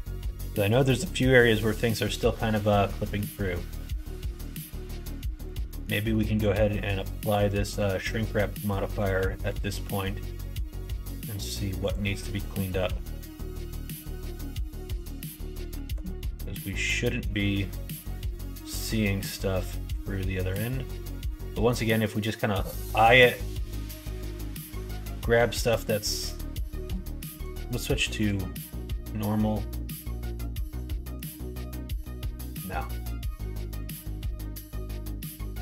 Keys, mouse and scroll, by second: 1.3 middle click, 2.9 middle click, 3.4-4.8 middle drag, 5.3 click, 5.6 middle click, 6.1 middle click, 7.1 middle click, 7.6 middle click, 8.6 shift+middle click, 10.2 middle click, 10.9 middle click, 11.8 click, 12.8 3, 13.3 alt+z, 13.8 click, 14.7 click, 15.8 alt+z, 16.3 middle click, 18.8 middle click, 19.9 click, 20.7 scroll up 1, 20.8 middle click, 21.1 scroll down 1, 21.4 middle click, 22.5 scroll up 1, 22.5 middle click, 23.0 click, 23.5-25.1 middle drag, 28.5-30.7 middle drag, 31.7 middle click, 32.5 ,, 33.0 ,, 34.2 middle click, 34.8 click.